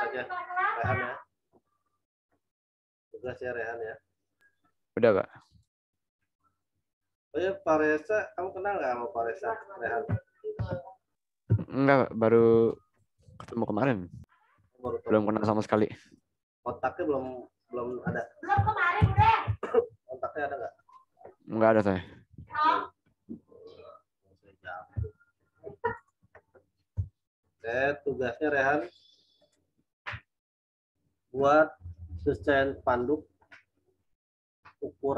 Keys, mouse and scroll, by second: 3.2 click, 10.5 2, 12.1-12.8 typing, 13.8 typing, 16.5 typing, 17.2 click, 18.5 typing, 19.7 Return, 22.3 z, 22.7 click, 25.5 z, 25.9 alt+click, 26.9 t, 29.3 click.